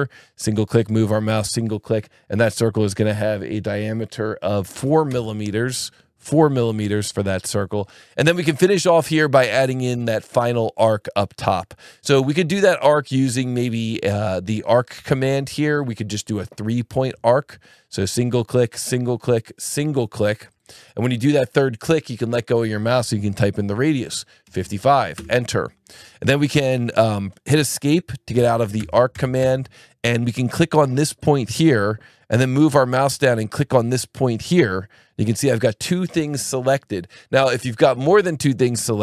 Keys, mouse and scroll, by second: 1.1 click, 4.7 KP_4, 5.1 KP_Enter, 14.9 click, 17.0 click, 18.1 click, 18.8 click, 20.5 click, 24.4 KP_5, 25.1 KP_Enter, 28.4 Escape, 31.2 click, 34.5 click.